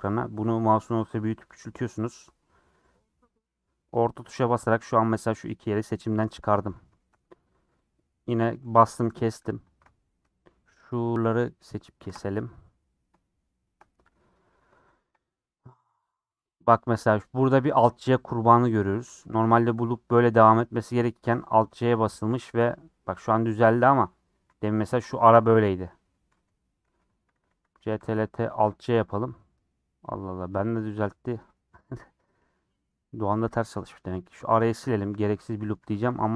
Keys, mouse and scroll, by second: 5.9-7.1 middle drag, 7.1 scroll up 1, 8.8 scroll up 4, 9.7 alt+click, 10.0 scroll down 1, 10.2-12.0 shift+middle drag, 12.0 alt+shift+click, 12.5 scroll down 6, 12.7-15.2 middle drag, 15.2 scroll up 2, 19.4 click, 20.1 j, 21.5 a, 22.0 alt+j, 23.5 ctrl+z, 24.6 click, 24.9 ctrl+x, 26.9 ctrl+z, 27.8 ctrl+t, 28.5 alt+j, 29.8 scroll down 2, 30.0 middle click, 30.7-31.0 scroll up 3, 31.0 middle click, 31.5 scroll down 3, 31.7-33.3 middle drag, 33.3 scroll up 3, 34.0 alt+click, 34.5 ctrl+x, 35.2 ctrl+x, 35.5 ctrl+middle click, 36.1 alt+z.